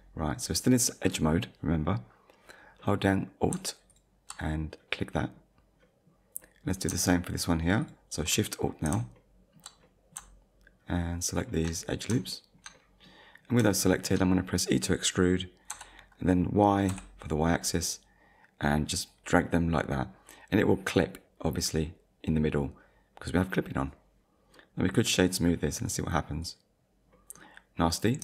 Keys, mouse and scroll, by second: 2.8 middle click, 3.9 alt+click, 4.9 middle click, 5.8 middle click, 7.8 alt+shift+click, 9.2 alt+shift+middle click, 11.3 alt+shift+click, 12.0 scroll down 2, 12.4 shift+middle click, 13.4-13.8 scroll up 2, 13.8 shift+middle click, 14.3 middle click, 15.7 e, 16.9 y, 21.6 click, 24.0 click, 24.6 middle click, 25.2 right click, 26.4 click, 27.1 middle click, 28.0-28.2 scroll up 2.